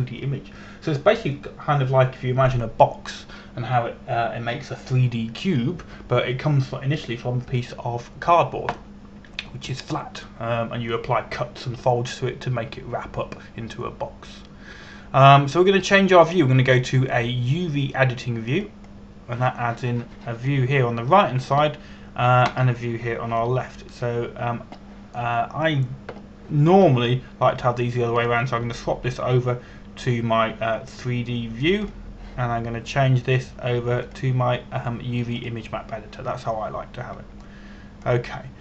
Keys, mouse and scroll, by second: 17.9 click, 20.5 click, 29.8 click.